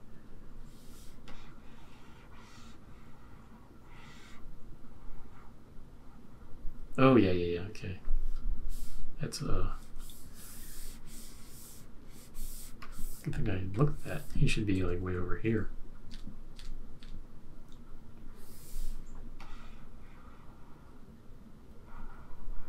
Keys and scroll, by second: 14.7 shift+Right, 14.9 shift+Right, 15.4 shift+Right, 16.1 shift+Down, 16.5 shift+Down, 16.9 shift+Up.